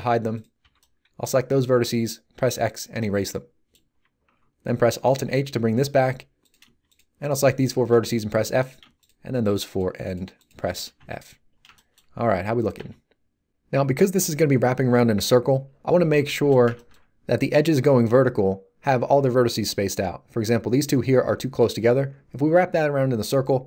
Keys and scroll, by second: 0.6 b, 2.3 x, 5.1 alt+h, 7.9 f, 10.9 a, 12.7 z.